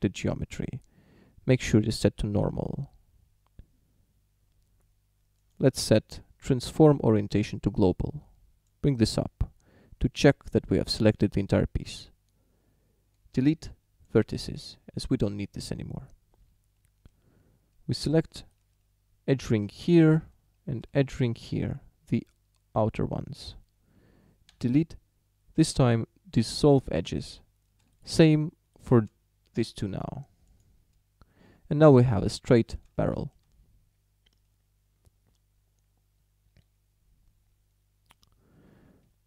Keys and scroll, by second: 13.4 Delete, 24.5 Delete, 30.4 Delete.